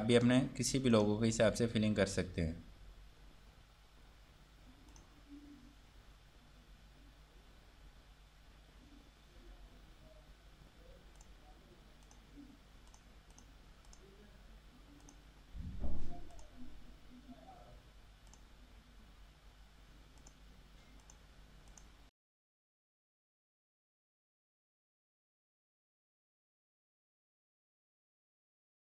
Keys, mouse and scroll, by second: 0.3 click, 1.5 scroll down 1, 3.3 typing, 5.1 click, 11.4 click, 28.8 click.